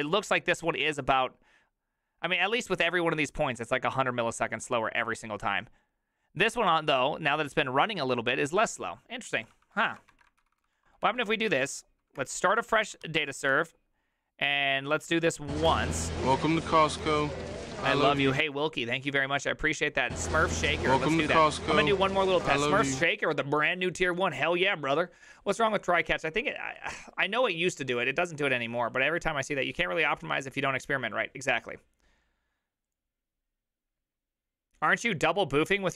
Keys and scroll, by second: 0.4-8.4 typing, 9.4 ctrl+c, 9.4 j, 9.6 ctrl+c, 9.9 ctrl+a, 10.2 2, 10.4 ctrl+c, 10.7 ctrl+c, 11.1 Up, 11.5 Up, 12.2 Return, 12.8 ctrl+a, 13.1 3, 13.5 Up, 15.7 Return.